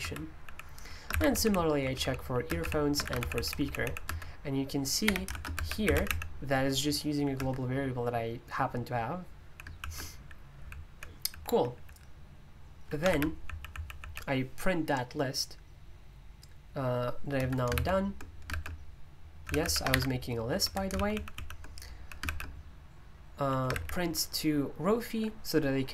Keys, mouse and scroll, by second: 0.0 Escape, 0.4-4.0 typing, 4.0 Escape, 5.0-6.6 typing, 7.3 Escape, 9.4-14.0 typing, 17.4 Escape, 17.7-22.2 typing, 20.6 Escape, 23.7 typing.